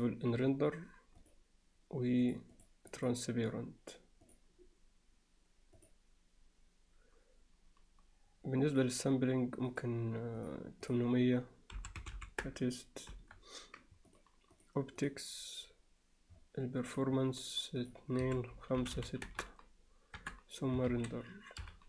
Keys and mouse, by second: 0.0 drag, 1.2 click, 2.3-2.7 drag, 3.0 click, 4.3 drag, 5.8 click, 8.8-9.9 drag, 10.4 click, 10.9-13.3 drag, 12.2 0, 14.2 click, 14.6-15.1 drag, 17.0 click, 17.8-20.4 drag, 20.9 ctrl+s.